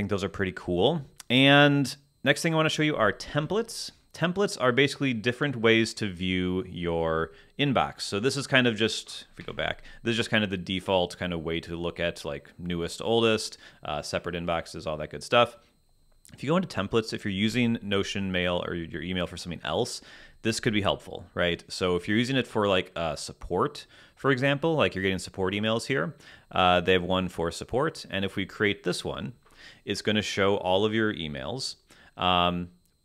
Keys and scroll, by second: 9.4 Escape.